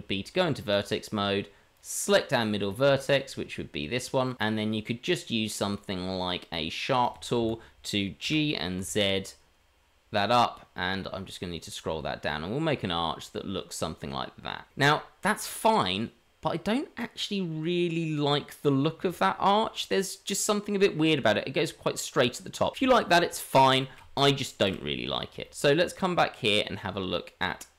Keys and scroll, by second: 7.6 g, 22.8 Tab, 24.5 Delete.